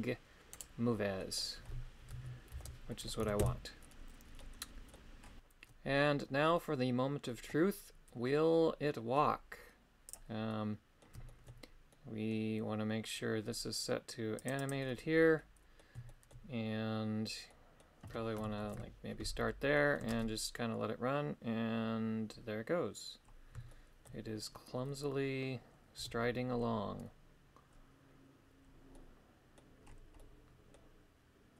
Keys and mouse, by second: 0.5 right click, 1.2 middle click, 2.5 alt+h, 2.9 middle click, 3.2 a, 3.4 a, 4.3 middle click, 10.2 click, 10.5 middle click, 11.3 shift+middle click, 11.9 middle click, 14.4 click, 14.6 click, 15.4 middle click, 16.1 shift+middle click, 17.5 middle click, 18.7 shift+Left, 19.7 middle click, 20.1 shift+space, 23.7 shift+middle click, 26.0 KP_3, 28.9 middle click, 30.2 middle click.